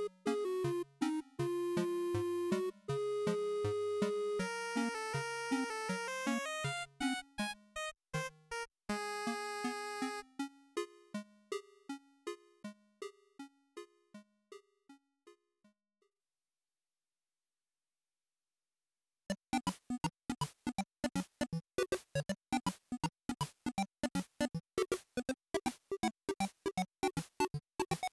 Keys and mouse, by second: 4.5 click, 8.7-10.0 drag, 16.1 click, 17.9 z, 25.8-27.6 drag.